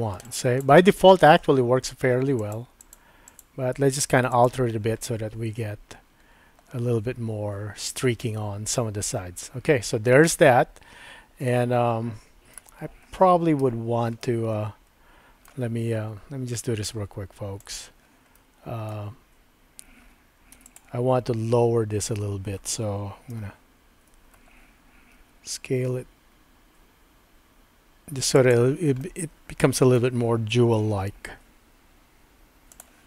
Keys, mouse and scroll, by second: 2.4 click, 2.8 click, 3.3 click, 4.5 click, 5.1-12.6 middle drag, 13.6 Tab, 14.2-15.5 middle drag, 17.6 click, 18.4 middle click, 20.6 3, 20.7 click, 23.3 ctrl+KP_Add, 25.1 s, 29.0-30.0 middle drag, 32.7 click.